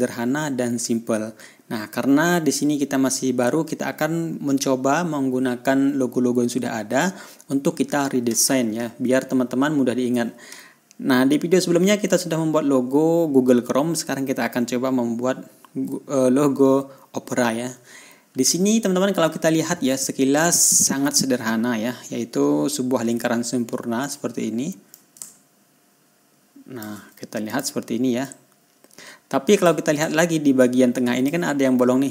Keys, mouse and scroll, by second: 20.8 ctrl+scroll up 2, 21.5 ctrl+scroll down 2, 24.5 click, 25.4-27.4 ctrl+drag, 27.9 click, 28.7-30.2 drag, 31.0 ctrl+click.